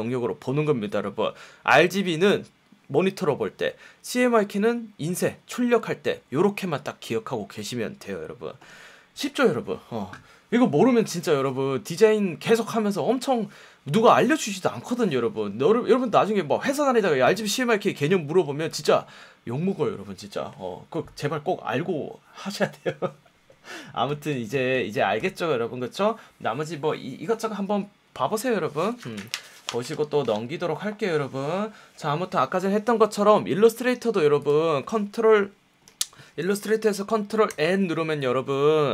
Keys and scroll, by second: 37.4 super+n.